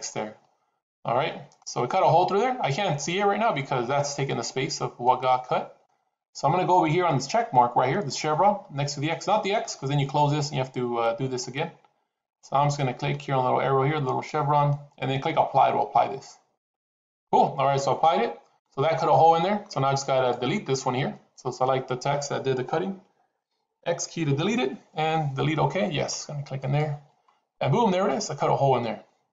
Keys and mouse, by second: 1.9-3.4 middle drag, 4.9 middle click, 13.9-16.8 drag, 18.0 middle click, 19.0 middle click, 20.0 click, 24.0 x, 27.7-29.3 middle drag.